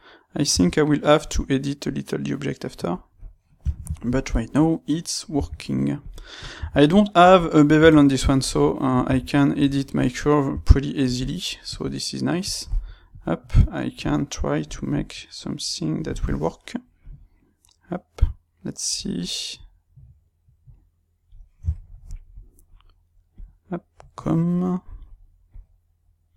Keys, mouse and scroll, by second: 0.5 g, 3.0 click, 3.6 ctrl+middle click, 4.4 click, 5.3 g, 6.3 click, 6.6 g, 7.6 click, 7.8 g, 8.9 click, 9.1 g, 9.9 click, 10.5 g, 11.1 click, 11.6 click, 12.3 click, 13.0 click, 13.9 click, 14.9 click, 17.0 click, 19.5 click, 21.6-23.3 shift+middle drag, 23.3 click, 25.4 click.